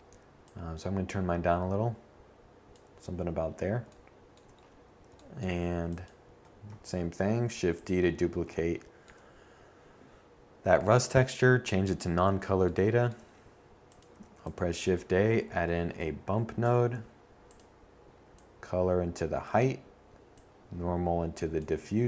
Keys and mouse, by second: 4.2 shift+d, 11.7 shift+a, 13.9 Down, 20.5-22.0 middle drag.